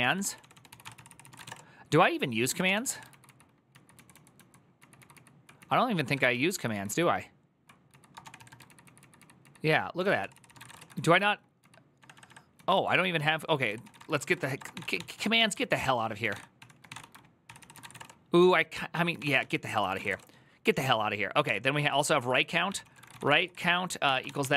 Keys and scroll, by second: 0.0-2.9 typing, 0.6 ctrl+c, 3.0 ctrl+k, 3.7 ctrl+j, 3.9 ctrl+j, 4.6 ctrl+k, 4.7 ctrl+k, 4.9 ctrl+k, 5.7-6.4 typing, 6.7 ctrl+j, 7.4-8.8 typing, 9.0 ctrl+k, 9.7 ctrl+w, 9.8 ctrl+o, 10.0 ctrl+c, 10.2-24.5 typing, 23.8 Tab.